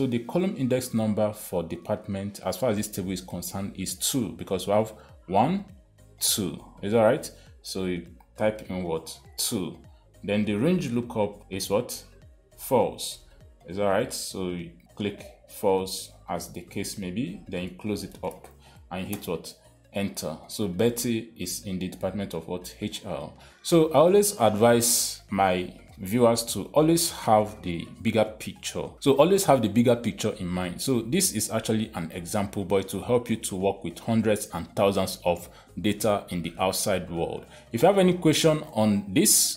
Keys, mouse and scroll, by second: 9.7 2, 11.9 ,, 16.6 click, 16.9 click, 18.6 shift+0, 19.6 Return.